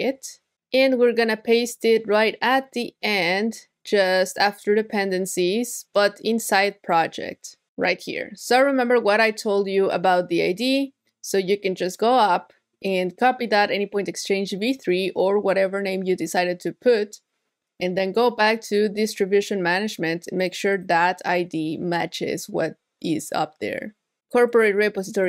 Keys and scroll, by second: 14.9 super+c, 21.4 super+v.